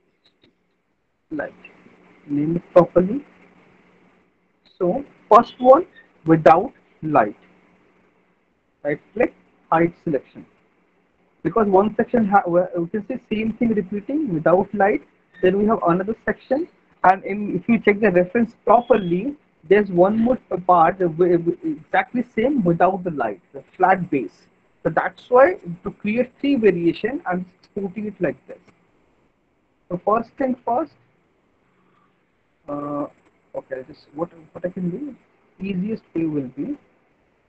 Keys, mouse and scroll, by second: 0.0-1.5 typing, 2.9 middle click, 3.3 middle click, 4.6 alt+middle click, 4.9 middle click, 6.0 alt+middle click, 8.0 right click, 8.8 right click, 9.9 click, 10.7 alt+middle click, 11.3 middle click, 26.5 alt+middle click, 29.1 click, 29.8 alt+middle click, 30.2 middle click, 30.5 alt+middle click, 32.0 click, 33.3 alt+middle click, 34.5 click, 37.1 click.